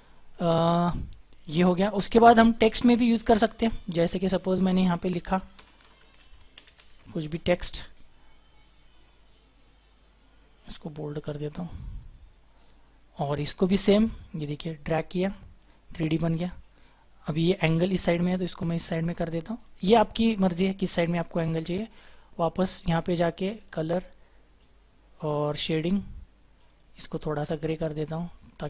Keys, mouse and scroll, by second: 0.0-3.0 scroll up 1, 5.5-7.0 typing, 14.3-14.7 scroll up 1, 15.0 typing.